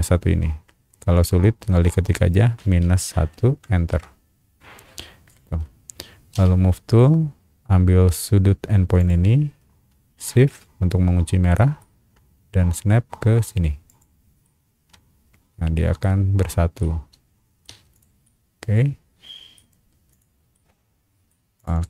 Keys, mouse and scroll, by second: 2.8 KP_Subtract, 3.3 KP_1, 3.9 KP_Enter, 6.3 m, 6.8 middle click, 6.8 scroll up 1, 9.0 click, 11.5 shift+middle click, 12.8-13.3 shift+scroll up 2, 13.8 shift+click, 14.4-16.0 shift+middle drag, 16.2-16.6 scroll down 2, 16.8 shift+middle click, 17.7 space, 17.9 click, 18.2-19.5 middle drag, 20.1 click, 20.5 middle click, 21.6 click, 21.7 click.